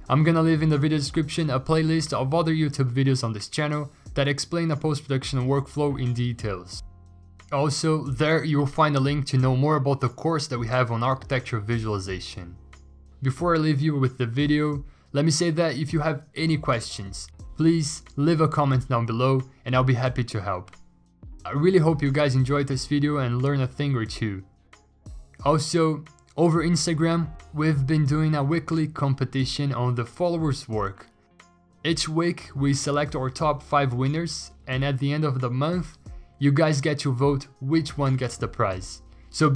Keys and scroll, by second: 1.4 scroll down 5, 2.6 b, 4.2 x, 5.6 x, 6.8 x, 8.3 ctrl+z, 8.4 x, 8.8 ctrl+z, 8.9 3, 10.3 ctrl+z, 10.7 x, 11.6 x, 12.5 x, 13.2 ctrl+z, 18.2 ctrl+alt+g, 19.9 ctrl+alt+g, 20.4 ctrl+alt+g, 24.5 x, 28.6 ctrl+alt+g, 31.7 b, 34.1 x, 34.8 x, 34.9 ctrl+z, 35.8 x, 36.4 x, 38.1 ctrl+z, 38.1 x, 39.5 x.